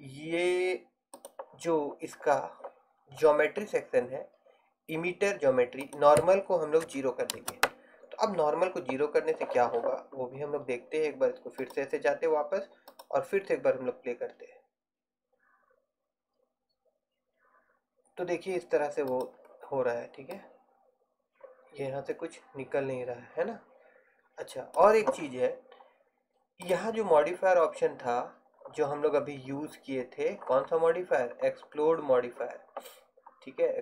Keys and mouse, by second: 11.7-14.9 drag, 19.4-22.3 drag, 26.7-33.7 drag, 33.7-33.8 middle drag.